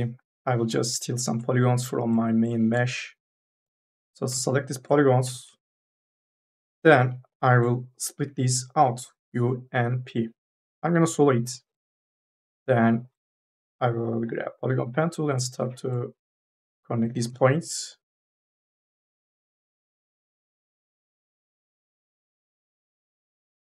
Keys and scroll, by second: 0.0 3, 0.2 e, 8.8 u, 9.2 p, 11.3 2, 17.4 ctrl+z, 23.0 ctrl+z.